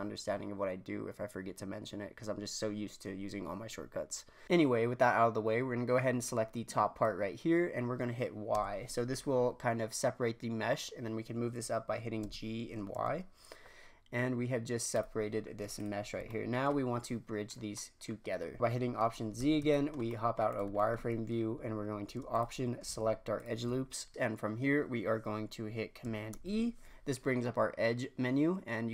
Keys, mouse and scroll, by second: 6.2 click, 8.5 y, 12.2 g, 15.4-15.7 scroll down 1, 15.7 click, 16.2-18.2 shift+middle drag, 18.2-19.0 scroll up 2, 19.3 alt+z, 19.7 shift+middle click, 20.5 click, 20.7-22.3 shift+middle drag, 22.3-23.8 alt+drag, 23.8 scroll down 1, 24.1 scroll up 2, 26.3 e.